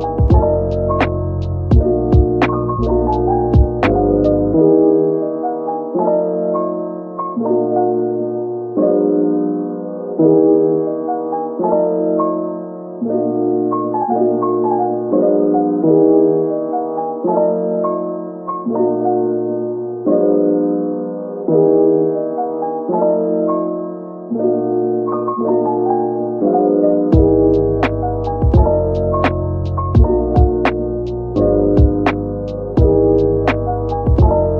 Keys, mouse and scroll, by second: 1.1 Tab, 2.1 Tab, 3.0 shift+click, 3.2 Tab, 4.1 double click, 5.0 3, 5.8 shift+click, 6.0 right click, 8.3 Tab, 9.0 middle click, 11.2 right click, 11.9 middle click, 13.1 Tab, 14.8 typing, 16.6 right click, 17.7 Tab, 18.9 right click, 20.3 Tab, 21.0 right click, 22.1 Tab, 22.3 middle click, 25.0 shift+click, 25.4 Tab, 27.0 shift+click, 28.8 Tab, 29.2-29.7 scroll down 1, 29.9 middle click, 33.4 right click.